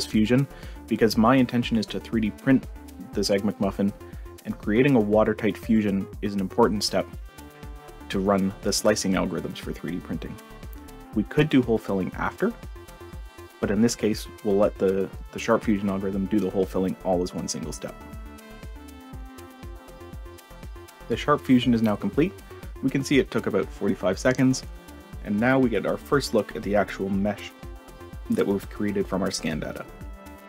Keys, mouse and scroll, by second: 23.6-23.9 drag, 24.2-25.4 drag, 25.9-27.5 drag, 27.9-29.4 drag.